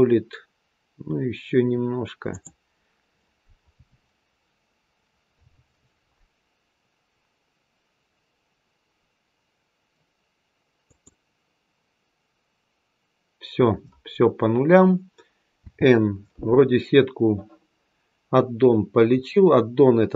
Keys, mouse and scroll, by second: 2.2 click, 10.7 click, 15.5 n.